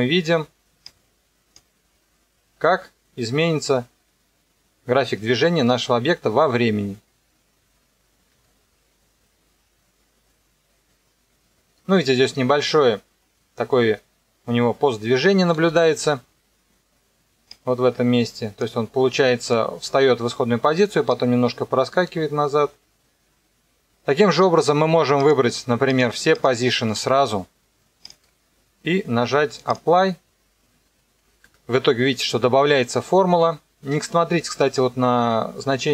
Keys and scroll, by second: 8.3 KP_0, 15.5 space, 23.7 space.